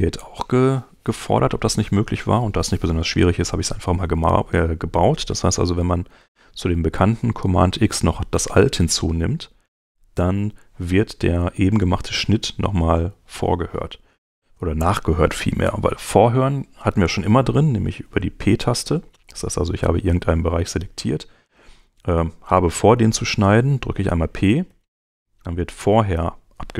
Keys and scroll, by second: 8.7 super+Tab, 24.4 p.